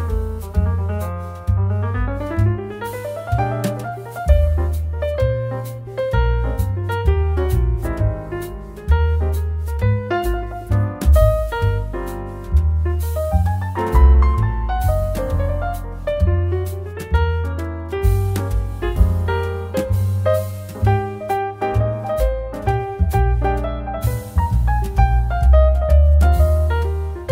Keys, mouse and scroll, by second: 3.7 click, 9.0 BackSpace, 9.8 Caps_Lock, 10.5-12.4 typing, 13.6-16.5 typing, 14.9 Caps_Lock, 18.9 click.